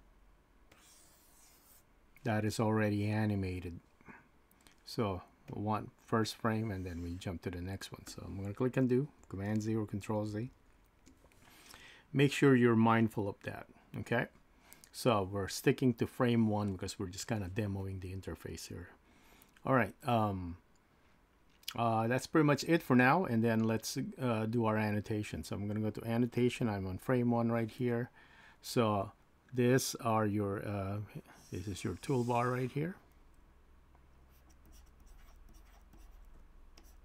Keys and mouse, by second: 5.5 click, 9.5 super+z, 10.3 super+z, 31.0-32.1 drag, 34.2-37.0 drag, 34.4-35.2 typing.